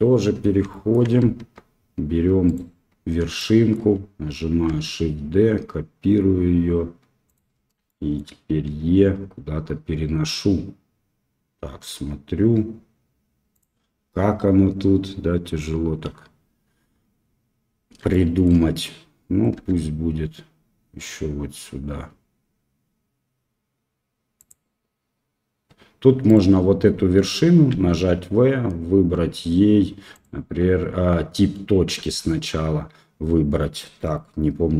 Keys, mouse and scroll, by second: 0.7 shift+middle click, 1.3 Tab, 2.4 click, 3.3 shift+middle click, 3.5 shift+click, 4.6 shift+d, 7.8 shift+click, 8.7 e, 18.1 shift+middle click, 19.5 e, 26.2 right click, 27.6 v, 31.9 w.